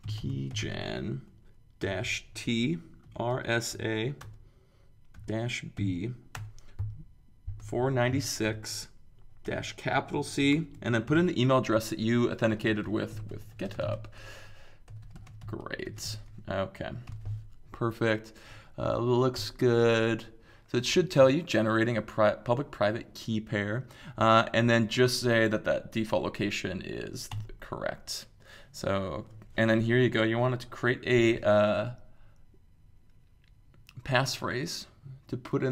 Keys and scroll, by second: 0.0-6.3 typing, 7.3-16.5 typing, 18.8 typing, 19.3 Return, 27.3 Return.